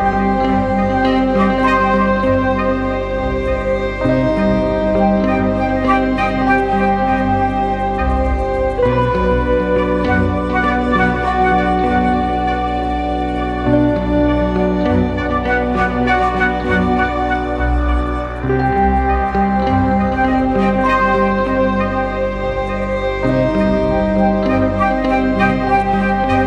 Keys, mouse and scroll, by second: 1.2 right click, 2.8 [, 3.3 double click, 18.5 double click, 18.6 right click, 19.8 double click.